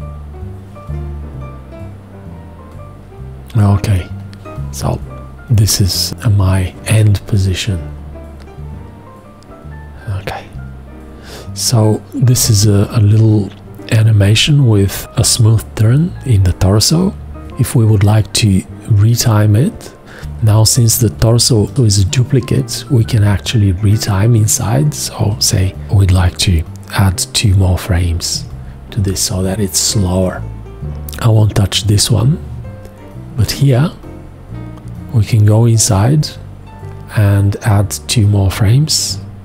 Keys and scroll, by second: 21.2 v, 27.9 z, 28.3 z, 39.1 z.